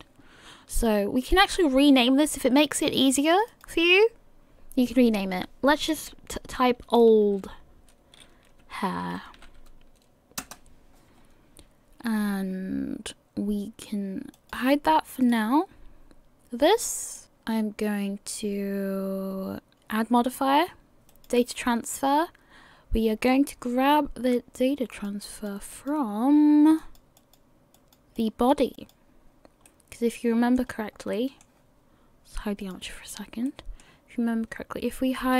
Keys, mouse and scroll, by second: 3.3 click, 3.5 click, 14.4 click, 15.2 click, 17.2 middle click, 19.7 click, 24.9 click, 25.3 click, 26.8 click, 27.2 click, 28.2 click, 28.8 click, 29.6 middle click, 30.6-31.3 scroll up 3, 31.1 middle click, 32.6 click, 33.2-33.7 scroll down 2, 33.5 middle click.